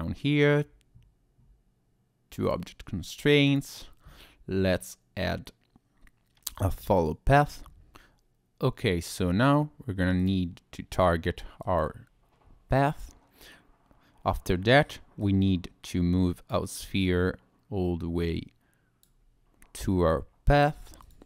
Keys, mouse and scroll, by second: 2.4 click, 3.5 click, 10.2 click, 15.2 click, 17.0 click, 21.0 click.